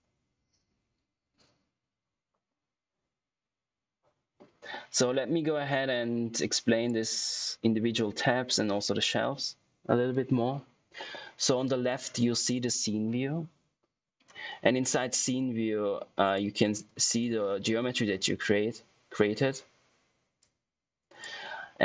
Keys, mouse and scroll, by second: 6.6 click, 6.6 typing, 16.3 click, 16.3 typing, 20.6 click.